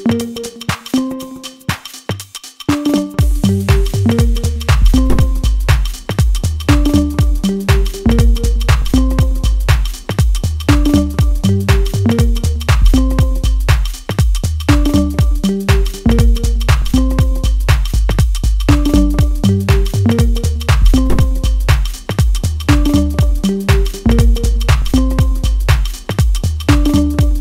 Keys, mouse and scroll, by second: 0.0 ctrl+z, 1.6 click, 7.7-15.4 drag, 18.0 click, 18.5-25.0 ctrl+shift+drag, 25.0-26.8 middle drag, 26.8 ctrl+alt+q, 27.3-27.4 middle drag.